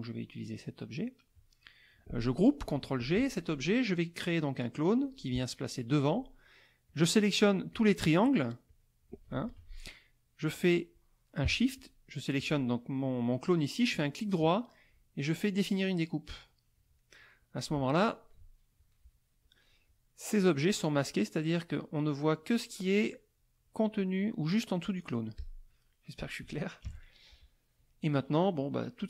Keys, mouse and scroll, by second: 3.0 ctrl+g, 5.0 click, 6.9 click, 7.7 click, 8.2 click, 8.7 click, 9.4 ctrl+z, 11.7 shift+click, 14.2-16.2 right drag, 17.0 middle click, 25.4 click, 25.8 middle click, 26.8 KP_Subtract, 27.5 middle click, 28.2 middle click.